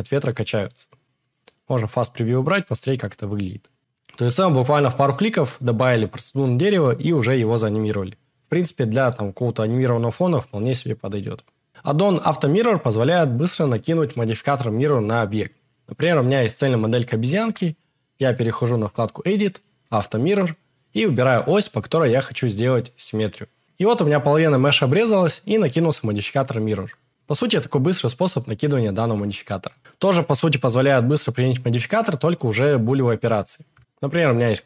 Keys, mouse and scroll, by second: 1.9 click, 4.2 click, 19.6 Tab, 23.6 Tab, 29.8 shift+a, 30.6 x, 31.2 shift+a, 32.9 g, 34.2 click, 34.4 g.